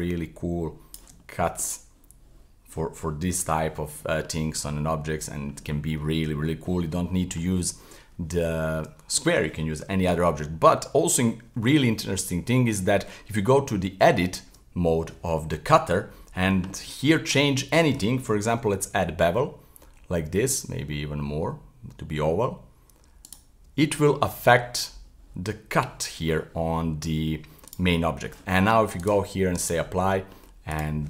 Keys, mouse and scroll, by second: 1.2-11.6 middle drag, 13.6 Tab, 15.5-17.9 middle drag, 18.5 b, 24.0 Tab, 24.3-27.7 middle drag, 27.7 right click, 28.0-29.0 middle drag, 29.0-29.9 drag, 29.9-30.7 middle drag, 30.7 right click.